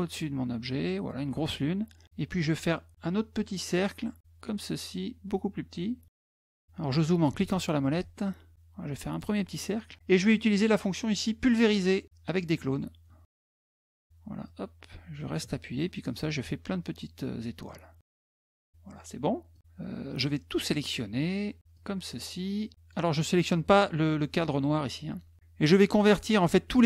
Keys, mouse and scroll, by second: 3.5 click, 4.2-6.1 ctrl+drag, 6.3 scroll up 4, 7.7-9.0 ctrl+drag, 12.5 click, 14.2-18.4 drag, 19.3 click, 21.6-22.7 drag.